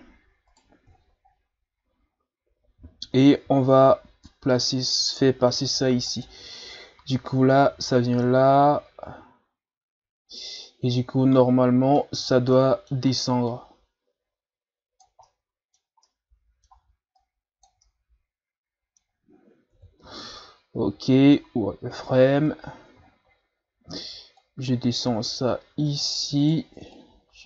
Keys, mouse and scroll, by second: 0.5 right click, 0.9-1.3 shift+scroll down 1, 1.3 scroll up 1, 3.4 e, 10.7-12.3 middle drag, 12.3 shift+scroll down 3, 12.5 middle click, 13.5-15.2 drag, 15.2-17.2 middle drag, 17.2 click, 17.9-19.7 middle drag, 19.7 KP_3, 20.8 z, 21.9 ctrl+s, 22.6-24.3 ctrl+scroll down 7, 24.4 click, 26.4 right click, 26.9 click.